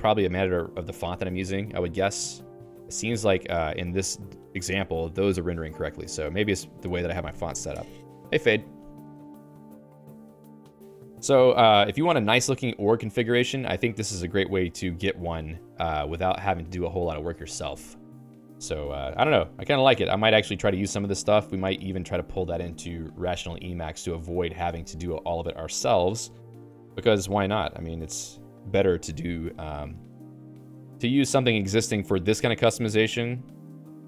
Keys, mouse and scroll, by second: 0.8 Escape, 1.4 j, 1.8 j, 2.3 j, 2.6 j, 6.1 j, 6.8 Escape, 9.7-15.7 typing, 16.1 Escape, 17.8 k, 18.6 j, 25.8-26.8 j, 29.9-33.1 typing, 33.3 ctrl+d, 33.5 ctrl+d, 33.7 ctrl+d.